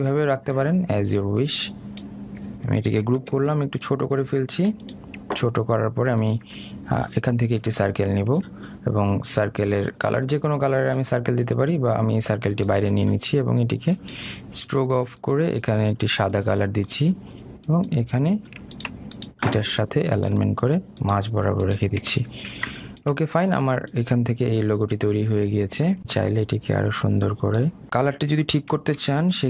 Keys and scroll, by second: 4.4 ctrl+g.